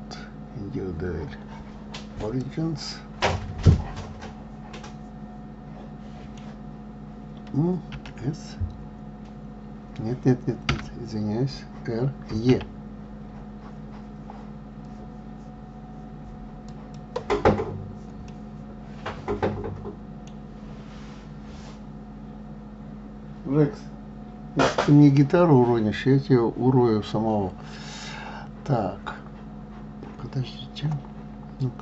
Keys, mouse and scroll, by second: 3.7-6.7 middle drag, 18.6-19.9 middle drag.